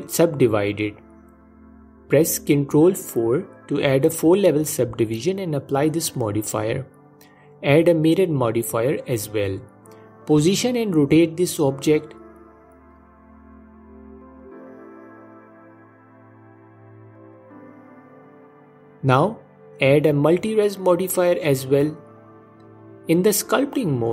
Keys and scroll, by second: 2.5 ctrl+3, 7.0 s, 9.4 s, 11.1 s, 14.0 s, 21.7 ctrl+Tab.